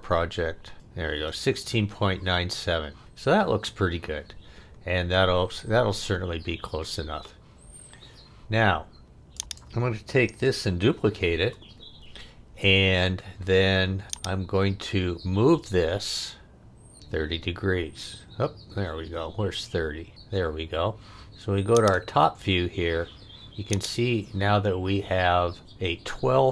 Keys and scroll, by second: 11.2 super+d.